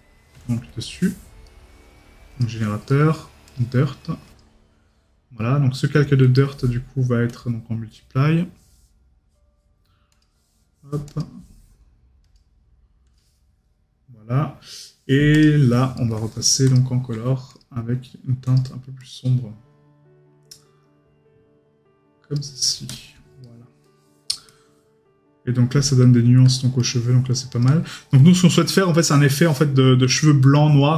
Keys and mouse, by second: 1.4 right click, 2.9 right click, 16.0 right click, 23.4 right click, 27.9 right click, 28.4 middle click.